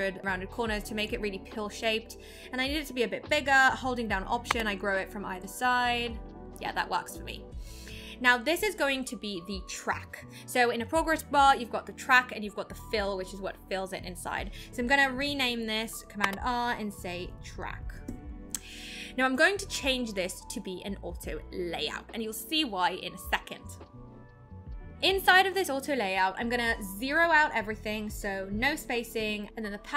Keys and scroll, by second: 16.2 super+r.